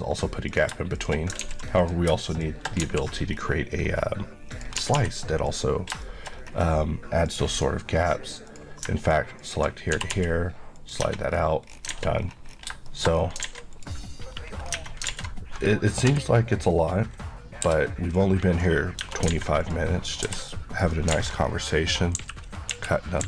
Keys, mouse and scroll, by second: 0.7 click, 1.5 ctrl+x, 1.8 click, 2.9 x, 3.4 scroll down 1, 3.9-4.6 scroll up 1, 4.6 click, 4.8 g, 5.5 click, 6.1 shift+middle click, 6.4-7.3 shift+scroll up 2, 7.3 click, 8.5 click, 10.0 typing, 10.8 click, 11.3-11.7 scroll down 1, 12.0 alt+a, 12.2-12.6 scroll down 1, 12.9 shift+middle click, 13.2 shift+scroll down 2, 13.5 alt+a, 13.8 click, 14.3 scroll up 1, 14.8 Tab, 15.1 alt+a, 16.1 l, 17.7 p, 18.2 click, 19.0 Tab, 19.3 alt+a, 19.7 click, 20.3 g, 20.9 right click, 21.2 alt+a, 21.5 scroll down 1, 22.2 KP_2, 22.8 KP_1.